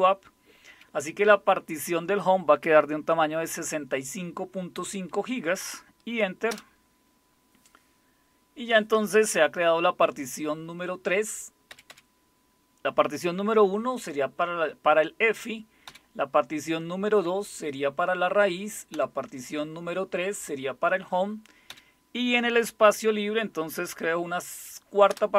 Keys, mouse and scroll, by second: 6.5 Return, 11.7 Up, 11.9 Up, 15.9 Down, 18.9 Down, 21.7 Down, 25.1 Return.